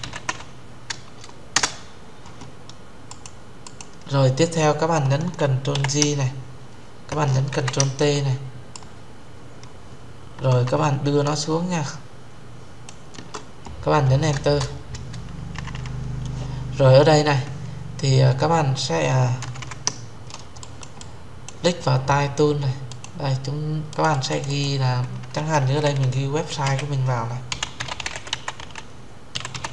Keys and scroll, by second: 1.3 Return, 5.4 ctrl+j, 7.2 ctrl+t, 14.1 Return.